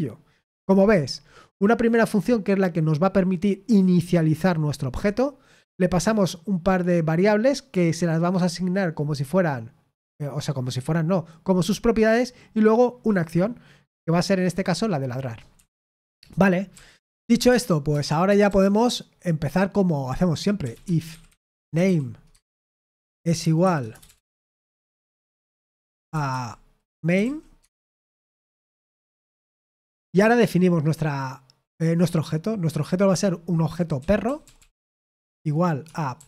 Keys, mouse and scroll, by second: 15.5 Escape, 16.6 o, 17.4 BackSpace, 17.8 Return, 18.2 BackSpace, 18.4 BackSpace, 20.4-29.8 typing, 33.0-36.2 typing.